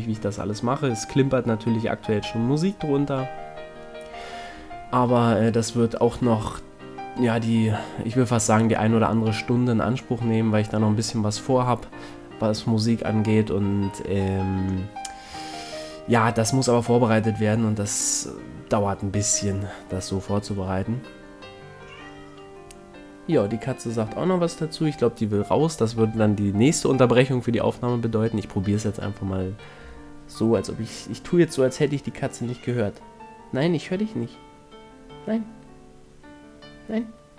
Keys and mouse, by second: 1.6 click, 2.4 f, 4.0 KP_1, 5.0 z, 6.6 e, 7.2 s, 11.0-13.3 middle drag, 13.6 KP_3, 14.8 z, 15.8 z, 19.2 e, 23.0 a, 23.2-24.4 middle drag, 24.5 z, 25.4 middle click, 27.8-29.4 middle drag, 29.5 middle click, 30.6 middle click, 31.1 ctrl+Tab, 31.9 right click, 32.3 x, 34.0 x, 35.2-37.0 middle drag.